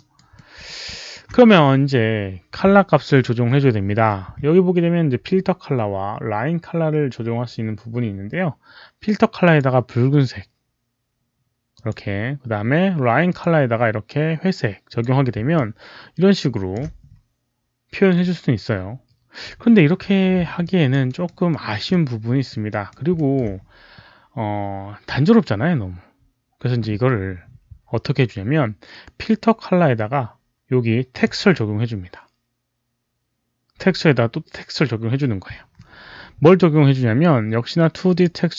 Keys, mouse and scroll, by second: 0.2 alt+middle drag, 0.8 alt+click, 7.3 alt+click, 7.3 alt+middle click, 7.3 alt+right click, 9.3 click, 9.5 alt+middle click, 9.5 alt+right click, 11.6 click, 13.2 click, 14.8 click, 15.4-16.6 alt+drag, 18.8 alt+click, 20.5 alt+click, 21.0 alt+right click, 21.4 alt+middle click, 21.8 alt+click, 22.6 alt+right click, 23.0 alt+middle click, 29.1 alt+middle click, 29.1 alt+right click, 31.0 alt+click, 31.0 alt+middle click, 31.0 alt+right click, 31.1 alt+middle click, 31.1 alt+right click, 33.5 click, 33.5 alt+middle click, 38.0 click.